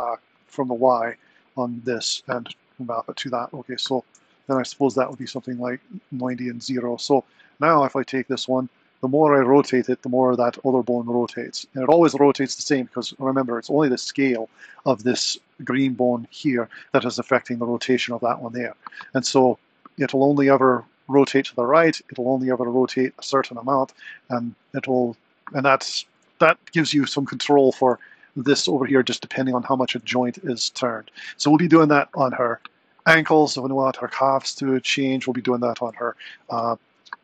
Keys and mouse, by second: 3.7-5.7 drag, 7.2 click, 8.2 r, 28.0 click, 29.2 click, 30.0 r, 35.6 super+Down.